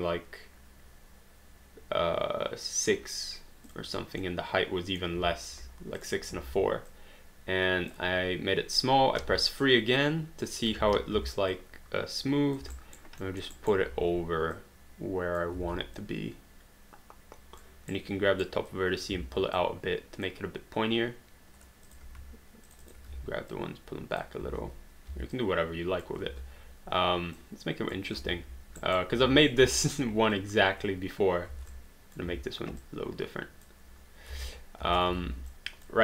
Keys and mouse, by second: 3.7 click, 4.2 middle click, 6.0 click, 6.4 r, 6.9 click, 9.2 3, 10.0 click, 10.8 ctrl+z, 11.5 click, 12.7 alt+right click, 13.3 alt+middle click, 13.5 alt+right click, 14.0 e, 14.6 click, 15.6 r, 16.0 click, 17.9 right click, 18.7 click, 19.1 w, 19.6 click, 21.9 click, 21.9 q, 22.7 shift+click, 23.1 w, 23.5 click, 24.4 r, 25.1 w, 25.3 click, 26.3 z, 27.4 click, 28.8 alt+right click, 29.9 alt+right click, 30.3 click, 31.5 r, 31.7 click, 32.3 w, 32.8 click, 34.3 space, 35.2 alt+d, 35.6 alt+click.